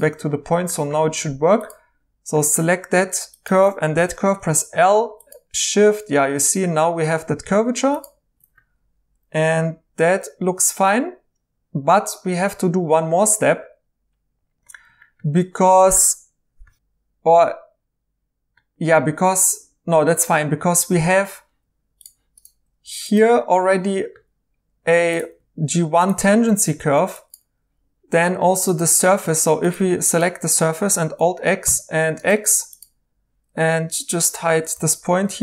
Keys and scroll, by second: 0.0 2, 3.9 1, 22.8 2, 24.2 1, 26.4 ctrl+z, 26.7 ctrl+z, 28.4 3, 29.8 Tab, 31.1 alt+x, 31.6 x, 34.7-35.4 typing.